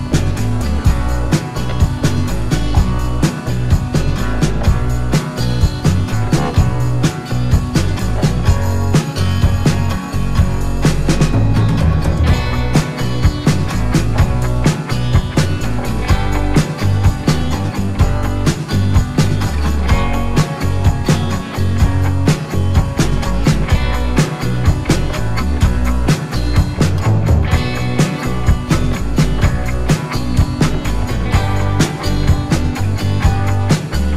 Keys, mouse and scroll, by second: 4.1-4.7 scroll up 2, 5.0-5.6 scroll up 2, 5.9 scroll up 1, 7.3-7.7 scroll down 1, 8.1 scroll down 1, 8.8 alt+scroll down 2, 9.9 click, 10.6 ctrl+t, 11.4 right click, 12.5 click, 16.4 alt+click, 18.4 Return, 19.4 click, 20.5 click, 22.1 Return, 23.4 click, 24.6 t, 25.9 click, 27.5-32.7 typing, 33.4 click.